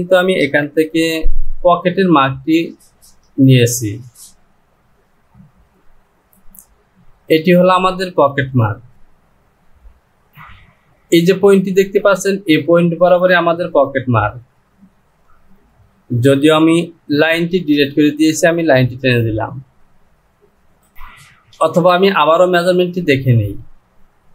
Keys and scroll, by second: 22.0 ctrl+z.